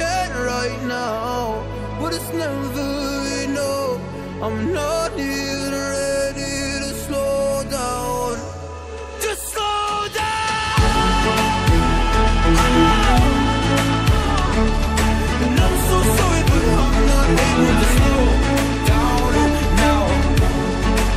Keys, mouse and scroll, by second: 0.0 scroll down 1, 0.4 scroll up 1, 1.4 scroll down 1, 3.3 Delete, 4.2 click, 7.4 click, 8.5 click, 10.0 ctrl+z, 10.6 ctrl+z, 11.8 click, 13.6 click, 14.5 scroll up 1, 15.1 scroll down 1, 16.5 click, 17.8 ctrl+v, 18.8 click.